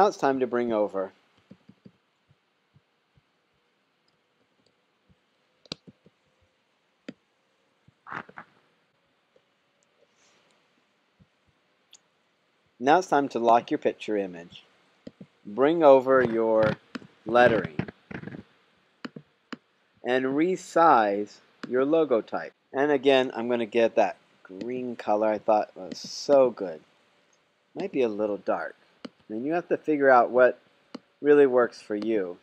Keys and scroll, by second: 1.1 super+-, 2.4 super+-, 4.0 super+-, 5.5 super+v, 8.9 super+z.